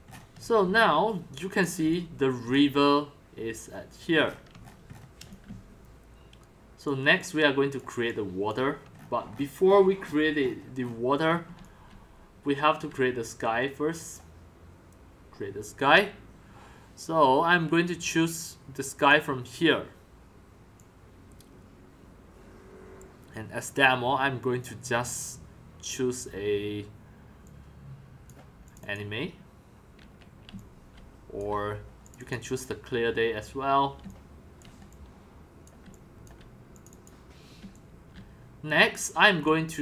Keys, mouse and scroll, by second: 0.6-2.7 typing, 2.9-4.2 drag, 4.4 middle click, 4.4-5.4 scroll, 5.2-8.5 typing, 7.9 click, 9.1 shift+middle click, 10.4 shift+middle click, 11.7-13.3 typing, 14.2-28.2 drag, 28.7 click, 30.6 x, 31.1 c, 31.5-34.1 drag, 34.1-36.2 typing, 35.1 drag, 36.4 drag, 36.7 click, 37.8-39.8 typing, 39.7 click.